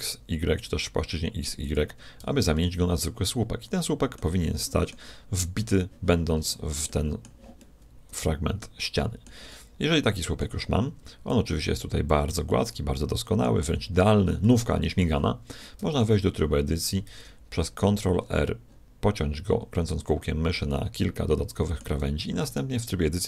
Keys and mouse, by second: 2.2 z, 2.6-11.3 middle drag, 11.3-13.1 drag, 12.5 middle click, 15.8 Tab, 17.1 ctrl+r, 20.0 click, 20.7 middle click, 21.6 click, 21.8 middle click.